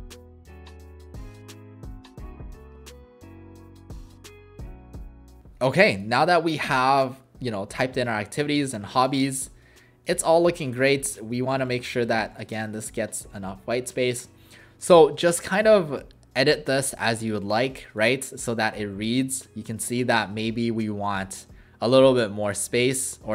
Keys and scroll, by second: 0.0-4.8 typing, 22.7 w.